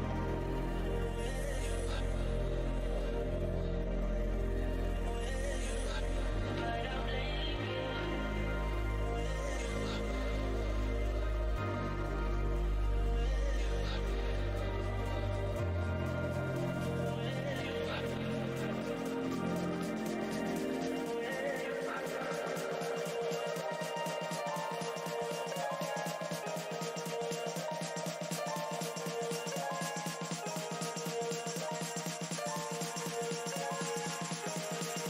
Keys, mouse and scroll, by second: 0.1 ctrl+right click, 0.3 scroll down 1, 0.3 space, 1.1 alt+click, 1.7 space, 3.0 z, 4.0 click, 5.7 ctrl+right click, 7.2 alt+click, 7.6 space, 9.6 alt+click, 11.6 alt+click, 11.7 scroll up 1, 15.3-16.1 typing, 16.4 click, 19.5 scroll down 1, 20.5 alt+click, 24.0 w, 25.2 alt+click, 27.7 right click, 28.1 alt+click, 28.2-28.8 scroll up 2, 28.2 z, 28.7 z, 29.6 click, 31.5 right click, 32.5 click, 32.9 Left, 34.0 right click.